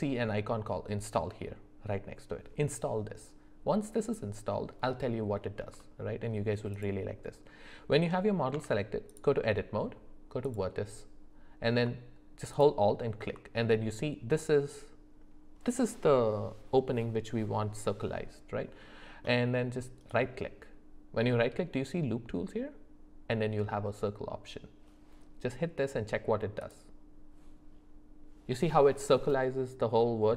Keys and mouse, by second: 4.9 middle click, 5.8-6.1 shift+middle drag, 8.5 Tab, 10.4 click, 20.0-26.7 right drag.